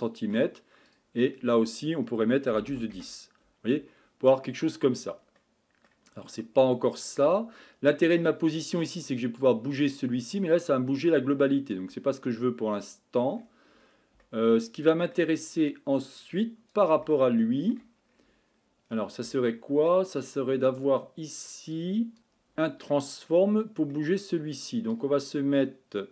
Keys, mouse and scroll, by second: 4.1-5.0 scroll up 10, 5.0-5.4 scroll down 1, 5.4-6.1 middle drag, 6.1-6.9 scroll up 2, 6.9-8.1 scroll up 1, 9.6-26.1 drag.